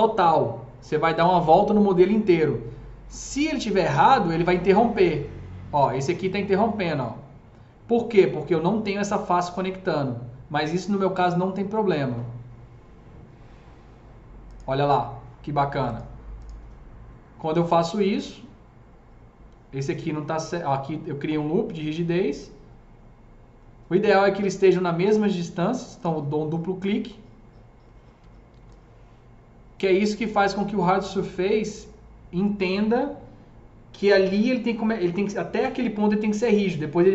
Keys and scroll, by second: 28.5 s.